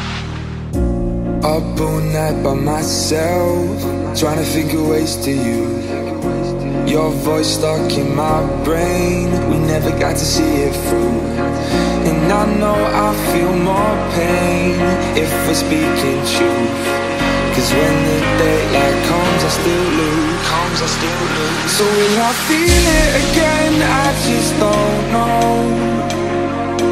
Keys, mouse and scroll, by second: 0.4-3.4 drag, 3.8 click, 5.2-8.3 drag, 11.7 click, 17.7 click, 19.1 z, 24.5-25.1 scroll down 1, 25.1-25.8 scroll up 2, 25.8 space.